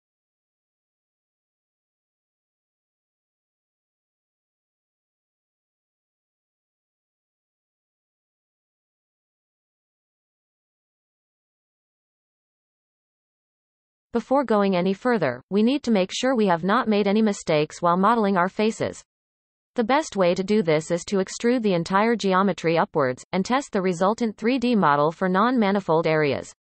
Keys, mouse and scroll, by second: 1.0 shift+click, 1.8-2.8 shift+middle drag, 2.8 shift+click, 3.3 shift+click, 4.2 shift+click, 4.8-7.1 shift+drag, 7.5-9.4 shift+middle drag, 9.4 shift+click, 10.2 shift+click, 10.9-12.5 shift+drag, 13.5 shift+click, 14.0 x, 15.2-15.7 scroll down 2, 16.1 scroll down 1, 16.1 shift+middle click, 16.6-17.7 scroll up 7, 17.7-18.4 scroll down 4, 18.4 shift+middle click, 18.9-19.5 scroll up 2, 19.5-20.0 scroll down 1, 20.0-22.2 shift+middle drag, 22.2 click, 22.3 x, 22.9-23.4 scroll down 1, 23.4 shift+middle click, 24.0-24.9 scroll up 4, 25.2 shift+middle click, 25.9 scroll down 1, 26.4-26.6 scroll down 5.